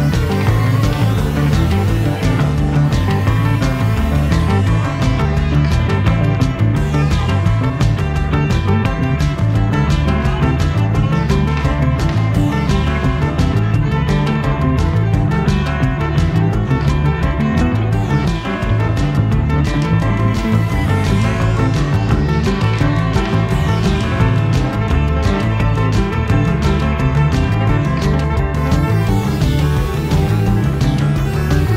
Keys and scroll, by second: 11.9 a, 14.1 super+j, 15.2 v, 18.1 i, 18.9 v, 27.2 a, 28.9 super+j, 30.0 a.